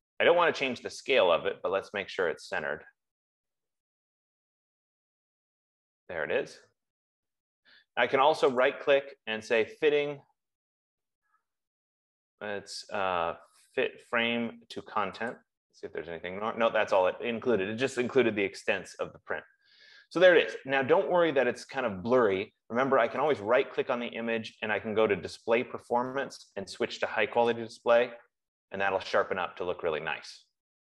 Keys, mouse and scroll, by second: 6.8 click, 9.1 right click, 15.9 click, 23.7 right click, 28.2 click.